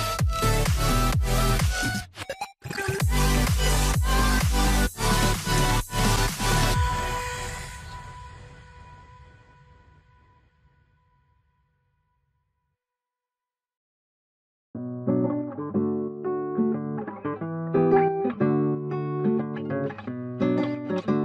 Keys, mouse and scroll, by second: 0.0 scroll, 0.1 scroll down 1, 0.5 alt+middle click, 0.8 scroll up 1, 1.2 ctrl+click, 2.0 alt+q, 2.4 scroll down 1, 2.7 middle click, 3.9 ctrl+a, 4.1 right click, 8.6 ctrl+click, 12.6-15.0 scroll up 1, 15.9 double click, 18.3 double click, 20.5 ctrl+z.